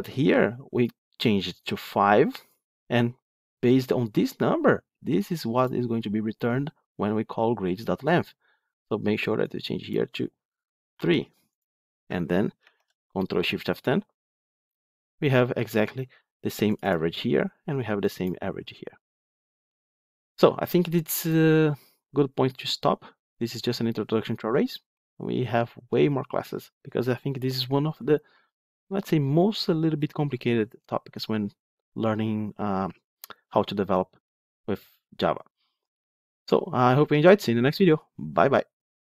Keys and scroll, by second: 12.5 ctrl+shift+F10.